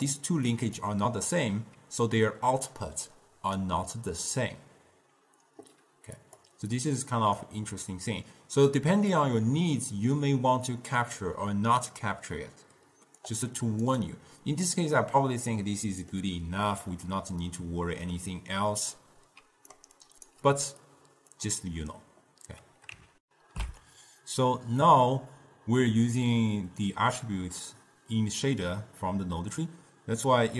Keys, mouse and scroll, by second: 0.0-3.7 typing, 0.0 click, 0.7 click, 2.9 right click, 5.3 d, 6.4 click, 6.9-9.4 drag, 15.1-17.0 middle drag, 17.0 scroll down 2, 17.1-19.5 middle drag, 19.5 d, 19.9 right click, 20.4 d, 21.0-23.3 drag, 23.3 ctrl+alt+shift+q.